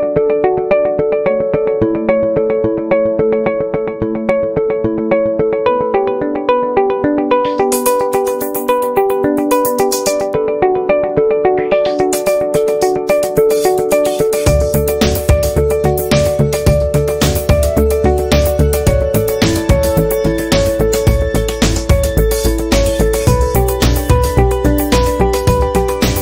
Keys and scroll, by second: 6.0 Right, 8.0 a, 9.5 i, 13.0 p, 24.5 i.